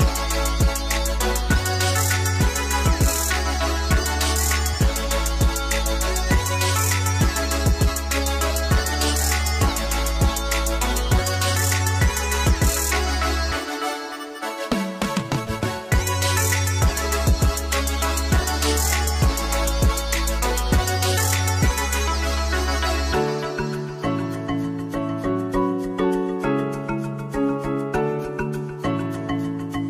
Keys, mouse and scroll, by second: 0.3-2.9 typing, 0.9 click, 0.9 Tab, 0.9 middle click, 1.3 click, 1.9 middle click, 2.1 scroll down 1, 2.3 click, 2.4 click, 2.6 click, 2.8 right click, 2.9 click, 3.0 right click, 3.5 middle click, 3.7 scroll down 1, 3.8 ctrl+j, 3.8 click, 3.9 middle click, 4.2 KP_Divide, 4.2 click, 4.3 s, 4.5 middle click, 5.1 click, 5.5 click, 5.7 scroll, 5.8 KP_Divide, 5.8 middle click, 6.0 ctrl+r, 6.2 a, 6.3 ctrl+r, 6.4 right click, 6.5 ctrl+r, 6.5 middle click, 6.8 KP_1, 6.9 ctrl+r, 7.0 right click, 7.3 click, 7.4 s, 7.8 right click, 8.0 ctrl+b, 8.0 middle click, 8.4 middle click, 8.6 Tab, 8.6 click, 8.8 Tab, 8.9 middle click, 9.0 e, 9.1 shift+click, 9.3 g, 9.4 click, 9.6-11.1 shift+middle drag, 9.7 e, 11.1 ctrl+right click, 11.3 g, 11.5 click, 13.3 shift+click, 13.6 s, 14.0-16.0 middle drag, 16.0 g, 16.3 Tab, 16.3 middle click, 16.4 g, 18.2-20.4 middle drag, 18.2-18.7 scroll up 2, 18.8 ctrl+r, 20.4 click, 21.3 scroll down 1, 21.4 click, 23.2 g, 24.4-26.7 shift+middle drag, 28.0 click, 28.3 middle click, 28.4 KP_0, 28.6 scroll down 1, 28.8 click, 28.8 Delete, 29.0 click, 29.1 z.